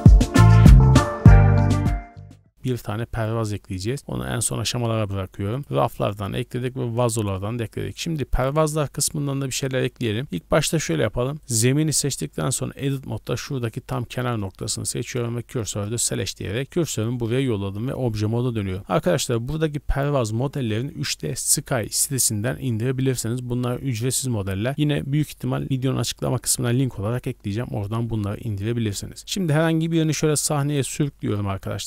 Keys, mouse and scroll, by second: 0.5-1.7 drag, 1.7 scroll down 3, 1.9 scroll up 3, 2.0 shift+middle click, 2.3 click, 4.0 middle click, 5.5-8.8 drag, 9.0 scroll down 1, 9.3 middle click, 9.8 shift+middle drag, 10.2 shift+middle click, 10.2-10.5 scroll up 4, 10.8 right click, 11.4 right click, 11.7 Tab, 12.3 1, 12.8 right click, 14.6 shift+s, 17.1 Tab, 29.8-31.0 drag.